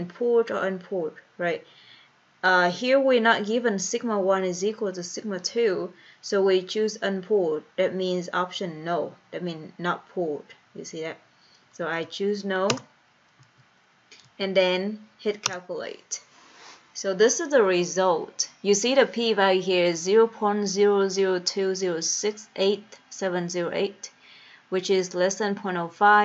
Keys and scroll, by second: 12.0 Down, 12.8 Return, 13.6 Down, 14.4 Down, 15.5 Return.